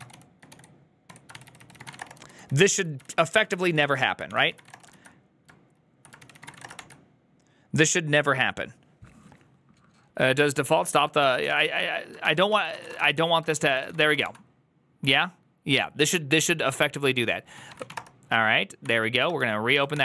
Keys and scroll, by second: 0.0-5.1 typing, 1.0 Tab, 1.2 ctrl+c, 1.3 ctrl+c, 3.7 ctrl+c, 4.2 ctrl+c, 6.1 ctrl+c, 6.4 typing, 6.5 Return, 6.7 ctrl+d, 11.3-14.4 typing, 12.1 ctrl+d, 13.3 ctrl+u, 19.6-20.0 typing.